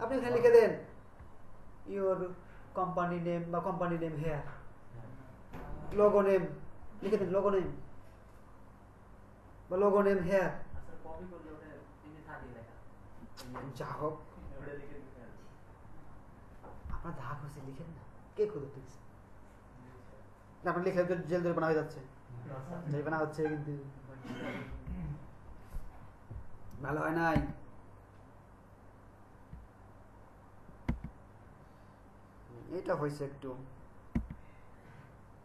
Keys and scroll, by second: 25.0 Right, 27.4 Right, 31.0 Right, 34.3 Right.